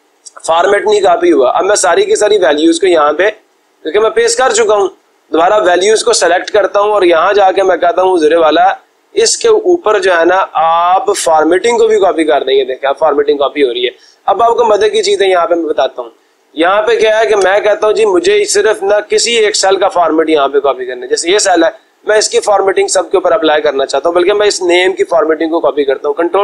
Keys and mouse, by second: 4.1 click, 7.9 click, 15.6 click, 16.3 click, 17.5 Escape, 20.5 click, 24.3-25.4 drag.